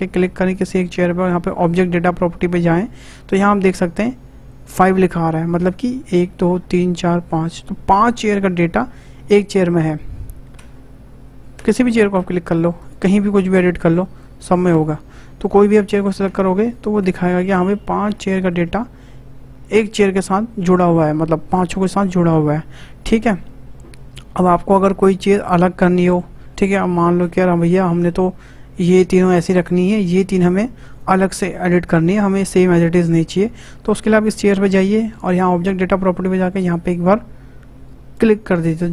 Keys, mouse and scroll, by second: 1.6 click, 10.6 Tab, 11.5 Tab, 11.9 click, 12.1 Tab, 12.8 click, 13.5 click, 14.7 Tab, 15.4 click, 15.9 Tab, 16.2 Tab, 16.6 click, 17.0 Tab, 17.5 click, 18.1 Tab, 25.5-26.4 middle drag, 26.4 scroll down 4, 26.9 shift+middle click, 27.5-27.8 scroll up 2, 27.8-29.1 shift+middle drag, 29.1 click, 30.4 click, 33.1 click, 34.3 click, 35.9 click, 38.1-38.9 drag.